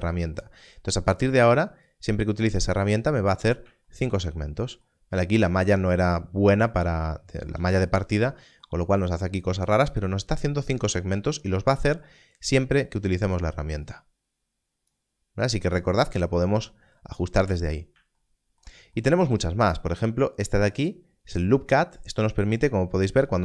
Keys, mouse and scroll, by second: 0.9 click, 11.0-12.5 scroll down 1, 12.5 click, 17.5 click, 17.6 scroll down 1, 20.8 click.